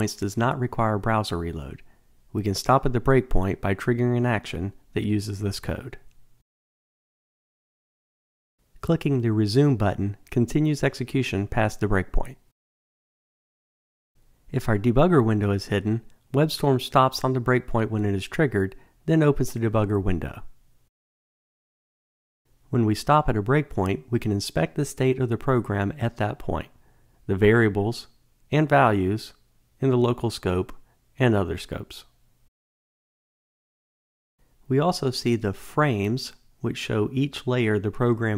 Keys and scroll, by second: 10.7 alt+super+r.